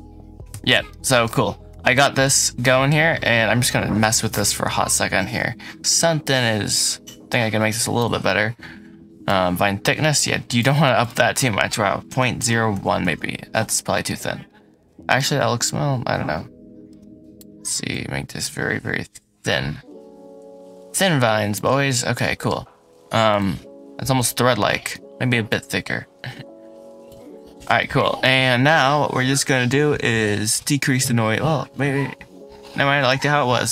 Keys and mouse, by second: 0.3 Escape, 0.7-1.1 middle drag, 1.6 g, 2.1 Escape, 2.5 middle click, 6.1-7.8 shift+drag, 9.2-10.5 drag, 10.8-12.9 drag, 13.9-15.0 middle drag, 17.2 shift+click, 18.1-21.4 shift+drag, 22.0-22.3 middle drag, 24.1 middle click, 25.5-26.9 shift+drag, 26.9-27.7 shift+middle drag, 27.7 click, 27.8-30.5 middle drag, 30.5-32.9 drag.